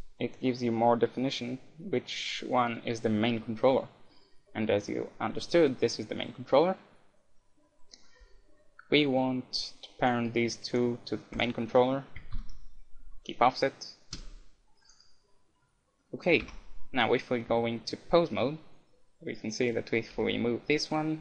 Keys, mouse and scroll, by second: 3.5-5.1 middle drag, 10.0-13.2 right drag, 12.3 ctrl+p, 14.9-16.6 right drag, 16.0-18.8 middle drag, 16.6 ctrl+Tab, 20.1 g.